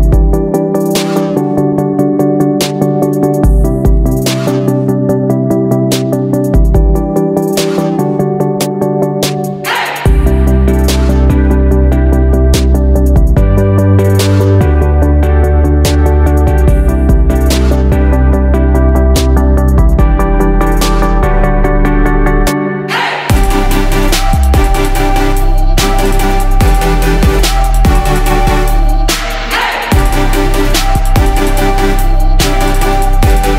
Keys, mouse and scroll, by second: 2.7 click, 6.5 shift+click, 7.0 shift+click, 7.9 shift+click, 9.2 click, 11.9 ctrl+g, 13.1 click, 15.9 Down, 16.0 Down, 16.4 Down, 18.0 click, 19.4 ctrl+shift+g, 20.7 ctrl+shift+g, 22.2-30.4 drag, 31.9 F4, 32.6 click, 32.9 F4.